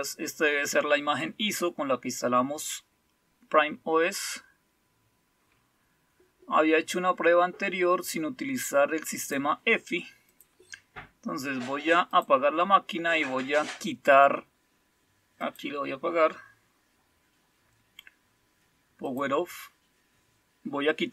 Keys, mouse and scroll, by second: 4.0-6.3 scroll down 3, 9.1 click, 10.3 click, 12.1 click, 15.4 click, 19.0 click.